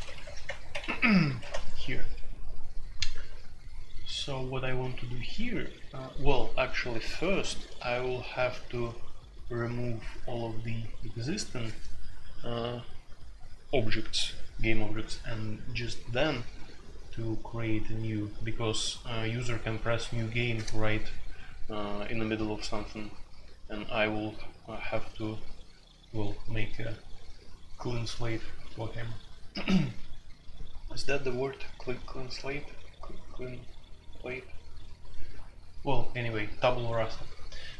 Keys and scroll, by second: 0.0-0.8 typing, 0.4 Return, 0.5 Return, 0.7 Escape, 1.2 Escape, 1.4 F2.